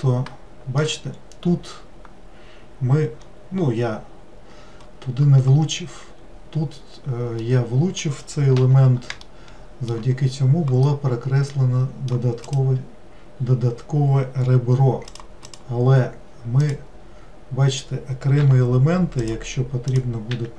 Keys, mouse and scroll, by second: 0.3-1.1 shift+middle drag, 1.1-2.2 scroll up 1, 3.2 scroll up 1, 3.8 scroll down 2, 5.5-6.2 scroll down 5, 6.2-6.7 scroll up 2, 7.4-8.6 middle drag, 8.6 3, 9.3-12.5 shift+middle drag, 12.5 click, 13.4 scroll down 2, 15.1 click, 15.5 click, 16.7 click, 18.4 e, 19.9 click, 20.3 e.